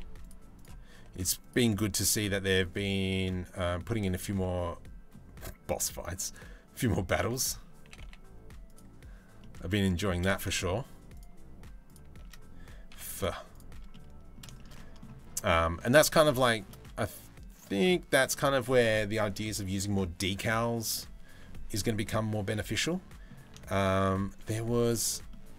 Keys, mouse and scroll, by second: 0.5 g, 4.1 middle click, 7.4 g, 9.0 middle click, 10.2 middle click, 12.8 z, 13.5 middle click, 14.2 shift+middle click, 14.3 middle click, 15.1 middle click, 15.9 shift+middle click, 16.4-17.4 middle drag, 21.1 middle click, 21.6 middle click, 22.3 shift+middle click, 22.5 middle click, 23.3 shift+middle click, 24.9 shift+middle click.